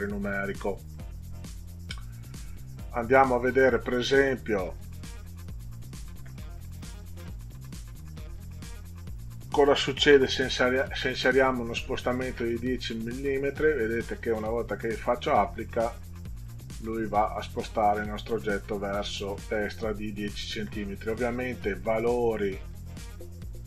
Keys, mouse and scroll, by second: 0.9 click, 3.8 click, 5.1 click, 9.5 1, 13.6 click, 15.8 click, 16.5 click, 17.1 click, 17.7 click, 23.2 click.